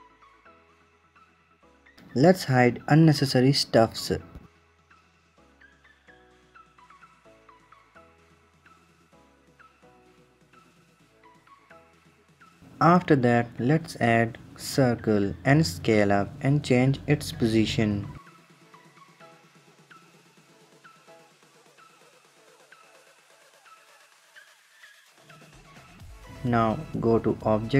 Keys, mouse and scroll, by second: 2.2 click, 2.4 click, 2.8 click, 3.0 click, 3.6 click, 3.9 click, 5.4 click, 5.7 middle drag, 5.8-6.5 scroll down 8, 6.5-8.0 typing, 6.7 click, 6.9 click, 7.2 click, 7.4 click, 7.7 click, 7.9 click, 8.3 scroll up 3, 8.5-10.3 shift+middle drag, 10.5 drag, 11.4 shift+a, 12.4-14.4 drag, 19.0 s, 19.7 KP_7, 20.0-20.3 scroll down 2, 20.3 s, 21.1-21.8 middle drag, 21.8 KP_1, 22.4 click, 24.6 s, 25.5-26.3 middle drag.